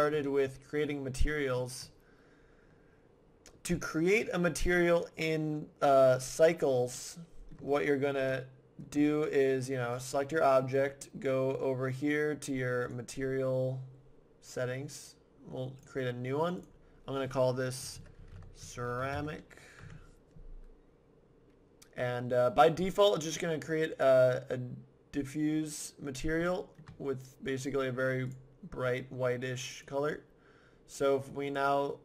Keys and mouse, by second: 0.2-5.5 middle drag, 7.0 middle click, 9.9 typing, 10.2-11.7 right drag, 11.7-12.8 middle drag, 12.8-14.6 right drag, 14.6-15.8 middle drag, 15.8 right click, 15.9-18.5 drag, 26.9-28.3 middle drag, 28.3-30.1 drag, 30.1-31.5 middle drag, 31.5-32.0 drag.